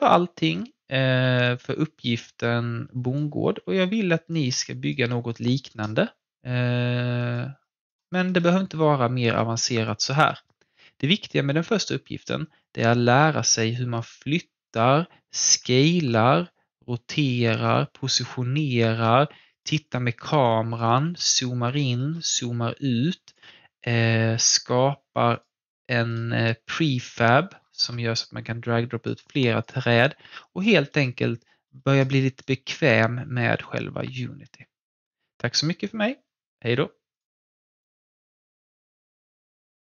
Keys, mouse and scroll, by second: 1.3-7.6 alt+drag, 8.3 alt+middle click, 8.7-9.3 alt+scroll up 2, 9.3 alt+middle click, 9.9 alt+click, 10.3 alt+middle click, 10.9-12.6 scroll up 1, 12.6 click, 16.2 e, 17.4 w, 18.7 click, 19.2-20.7 alt+drag, 21.0 f, 21.8-22.4 scroll down 1, 22.4 f, 23.3 click, 27.5 scroll down 1, 28.4 click, 30.0 alt+click, 30.9 alt+middle click, 31.1 alt+scroll down 1, 31.6 alt+middle click, 32.0 alt+click, 32.4-35.5 alt+right drag, 37.1 click, 38.0 click.